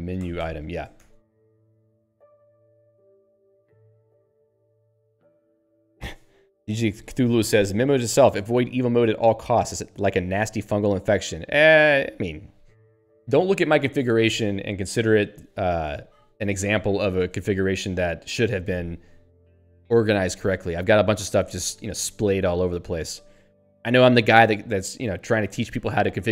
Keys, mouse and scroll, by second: 0.2 ctrl+g, 15.9 q.